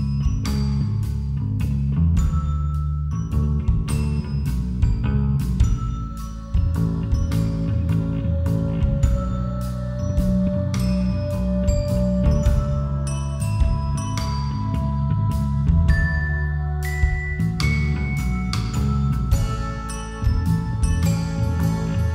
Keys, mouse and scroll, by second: 1.0-4.4 middle drag, 3.6 ctrl+z, 3.9 ctrl+z, 4.1 ctrl+z, 4.4 ctrl+z, 4.8 ctrl+z, 5.1 ctrl+z, 5.3 ctrl+z, 5.6 ctrl+z, 6.7 r, 10.8 a, 13.0 KP_5, 13.5 KP_0, 14.8-22.1 drag.